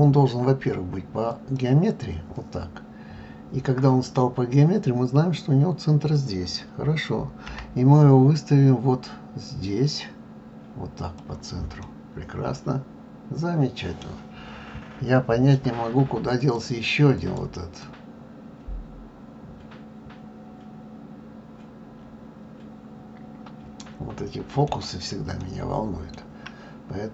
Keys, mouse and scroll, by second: 11.8-14.9 middle drag, 16.4 click, 17.1 click, 17.8-20.8 middle drag, 25.4-27.1 shift+middle drag.